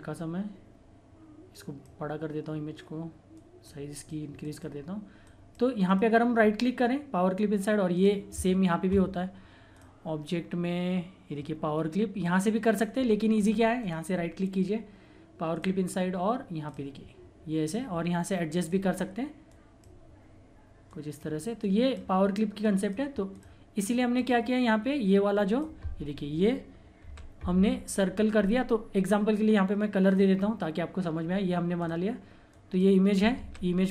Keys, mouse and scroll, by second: 0.9-2.4 typing, 1.5 click, 5.8 right click, 6.0 typing, 7.9 click, 12.2 typing, 13.3 click, 13.8 right click, 15.5 click, 15.5 click, 27.0 ctrl+z, 30.1 click, 33.3 ctrl+z.